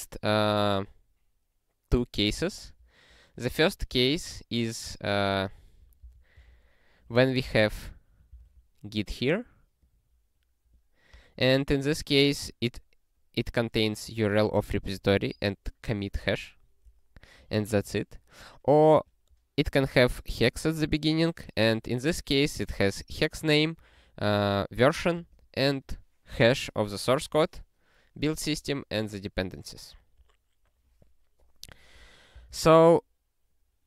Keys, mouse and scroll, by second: 2.4 alt+>, 4.7 scroll up 1, 5.6 click, 6.0 super+b, 7.2-8.1 typing, 8.3 Return, 9.8 click, 10.7 click, 11.1 click, 12.7 click, 14.2 click, 15.2 click, 15.3 double click, 19.1 click, 20.5 click, 22.3 click, 23.8 click, 24.1 double click, 25.2 click, 25.4 double click, 28.2 click, 29.0 click, 29.8 click, 32.3 super+b.